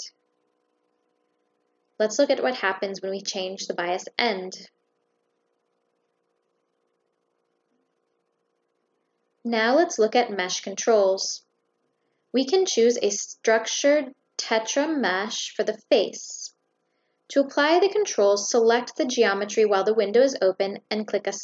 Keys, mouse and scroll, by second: 2.2 click, 9.1 click, 12.3 click, 13.2 click, 14.8 click, 16.3 click, 16.7 click, 17.2 click, 18.0 click, 18.3 click, 19.0 click, 19.7 click.